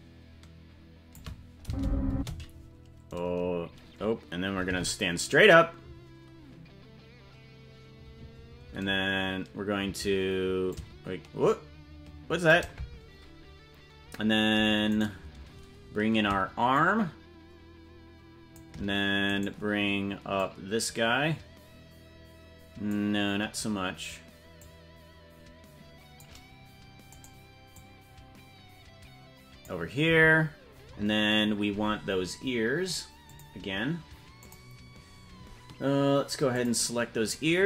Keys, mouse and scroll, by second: 1.6 space, 2.1 space, 4.7 alt+r, 10.6-12.5 shift+drag, 15.0 right click, 16.7-18.6 shift+drag, 19.3 right click, 20.3-22.9 drag, 24.5-26.2 drag, 27.2 right click, 27.7-29.6 drag, 33.2 click, 34.4 click, 36.5 click.